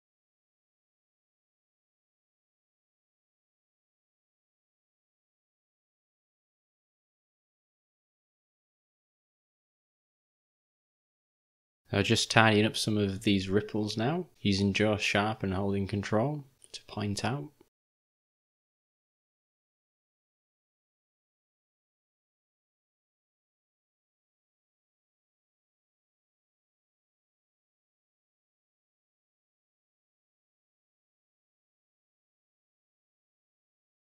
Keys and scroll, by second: 1.8 o, 2.1 ctrl+s, 3.4 Home, 5.4-6.5 typing, 11.3 [, 11.5 [, 13.1 [, 13.3 [, 13.4 [.